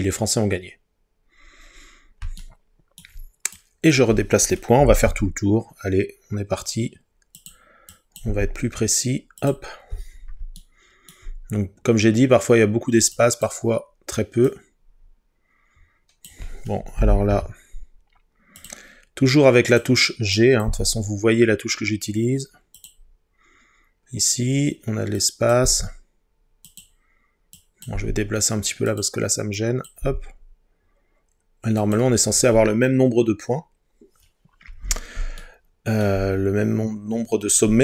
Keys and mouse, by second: 5.1 g, 7.4 click, 8.3 g, 9.4 click, 13.3 click, 14.5 click, 17.3 g, 18.6 click, 20.4 click, 20.7 g, 22.8 click, 25.7 g, 26.7 click, 27.6 click, 28.0 g, 28.9-30.0 drag, 30.0 g, 31.8 click.